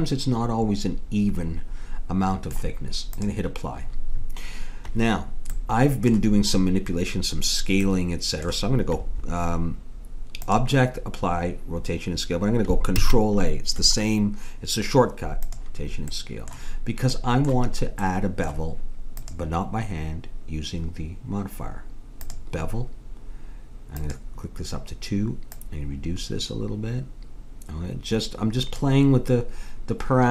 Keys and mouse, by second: 3.2-5.0 drag, 5.6-9.6 middle drag, 11.7 click, 13.0 ctrl+a, 16.2-20.3 middle drag, 19.2-21.0 drag, 24.0-27.3 drag.